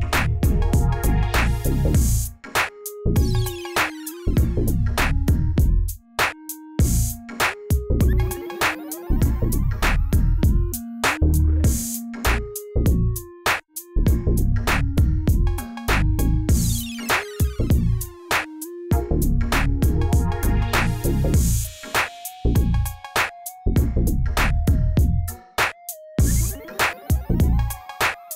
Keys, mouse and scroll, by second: 0.0 click, 0.7-4.5 drag, 4.5 click, 5.9 click, 6.2 click, 6.8 click, 7.1 click, 7.3 Delete, 7.9 click, 8.4 click, 9.3 middle click, 10.2 click, 10.7 click, 11.4 i, 13.1-14.7 middle drag, 15.3 ctrl+r, 16.8 Tab, 16.9 drag, 17.2-17.9 middle drag, 17.9 click, 18.3 g, 19.7 click, 20.0-20.4 scroll down 3, 20.4-21.0 shift+middle drag, 21.0 click, 21.3-23.3 drag, 23.5-23.9 middle drag, 23.9 KP_1, 24.3 scroll up 1, 24.6-25.2 shift+middle drag, 25.2 click, 26.7 click, 27.6 g.